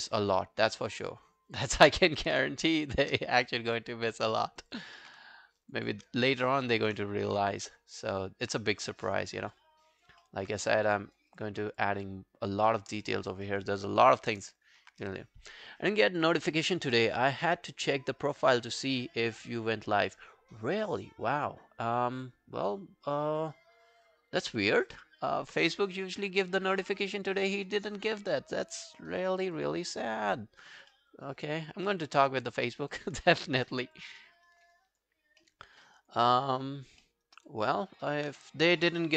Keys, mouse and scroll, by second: 1.8 alt+click, 3.0 shift+click, 3.4 alt+scroll down 1, 3.8 alt+click, 4.3 alt+middle click, 4.5 alt+right click, 4.7 alt+click, 5.8 shift+click, 6.2 alt+middle click, 6.5 alt+right click, 6.6 alt+click, 7.5 shift+click, 7.7 scroll down 2, 8.0 alt+click, 9.1 double click, 9.4 scroll down 3, 9.6 alt+click, 10.2 alt+middle click, 10.6 right click, 11.6 scroll down 2, 11.8 alt+click, 12.7 alt+middle click, 12.9 alt+right click, 13.2 alt+click, 13.5 alt+middle click, 13.7 alt+right click, 14.0 alt+middle click, 14.3 alt+right click, 26.8 right click, 30.9 alt+middle click, 31.3 alt+right click, 31.5 alt+click, 31.9 alt+middle click, 32.1 alt+right click, 32.3 alt+click, 32.7 alt+scroll down 1, 32.9 alt+click, 33.3 alt+middle click, 33.5 alt+scroll down 1, 33.6 alt+right click, 33.8 alt+click, 34.2 alt+middle click, 34.5 alt+right click, 34.8 alt+click, 35.2 alt+scroll down 2, 35.5 alt+middle click, 35.7 alt+right click, 35.9 alt+click, 36.3 alt+middle click, 36.5 alt+right click, 36.7 alt+click, 37.0 alt+middle click, 37.3 alt+right click, 37.5 alt+click.